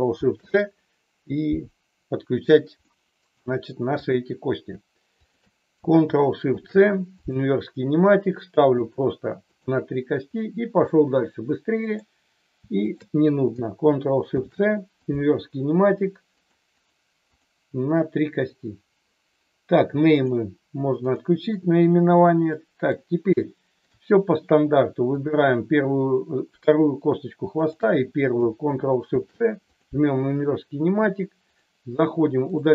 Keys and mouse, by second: 2.8-3.4 ctrl+shift+middle drag, 4.0 click, 5.2 shift+click, 6.4 ctrl+shift+c, 8.4 ctrl+shift+click, 9.4 ctrl+shift+click, 10.4-10.8 middle drag, 11.9 click, 12.7 shift+click, 16.4 ctrl+shift+click, 17.3 click, 20.2 click, 22.6 middle click, 23.3-23.8 shift+middle drag, 25.0 click, 31.4 ctrl+shift+click.